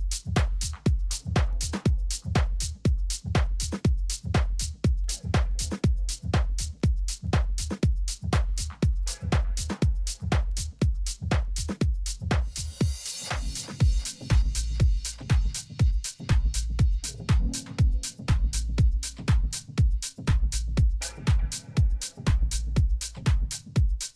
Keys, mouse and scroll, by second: 1.1 z, 3.2 KP_1, 3.8 z, 5.2 z, 5.7-8.0 middle drag, 7.0 a, 10.6-11.8 middle drag.